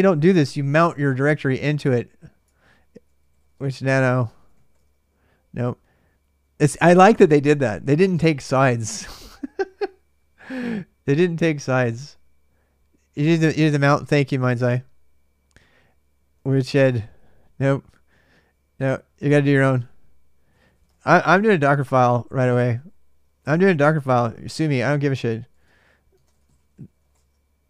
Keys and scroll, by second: 2.0-5.0 typing, 16.1-17.2 typing, 20.0-24.0 typing, 25.2-25.9 typing.